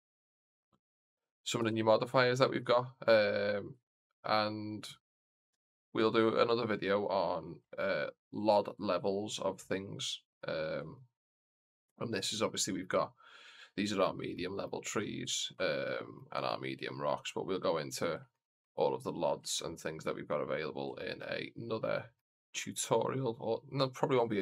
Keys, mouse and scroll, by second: 1.5 KP_0, 2.6 shift+middle click, 3.2-3.7 scroll up 2, 3.7 shift+middle click, 4.7 right click, 5.4 KP_Decimal, 6.2-6.9 scroll up 3, 6.9 middle click, 7.6 shift+scroll up 1, 7.6 shift+middle click, 8.1-8.9 scroll up 2, 9.1 scroll up 2, 9.1 scroll down 1, 9.5 middle click, 10.8 shift+middle drag, 11.4 scroll down 1, 11.8 middle click, 13.0-13.7 scroll down 2, 13.5 middle drag, 14.2 middle drag, 14.6-15.2 scroll down 3, 15.2 shift+middle drag, 15.9 middle drag, 15.9 scroll down 1, 17.1-17.6 scroll up 2, 18.2 shift+middle click, 18.8-19.4 scroll down 3, 19.4 shift+middle drag, 19.8-20.2 scroll up 2, 20.2-20.5 middle drag, 20.9 shift+middle drag, 21.4 scroll down 1, 21.7-22.1 middle drag, 22.5 shift+middle drag, 22.9 scroll up 1.